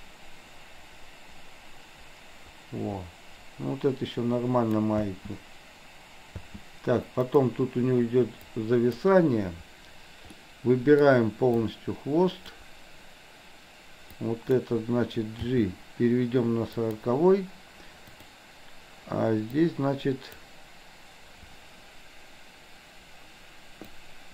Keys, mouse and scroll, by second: 5.1 space, 6.3 space, 7.2 click, 8.5-9.0 drag, 10.5-11.1 middle drag, 11.6-12.7 drag, 14.2 click, 15.5 g, 18.1 click, 19.6-20.5 drag, 24.1-24.3 drag.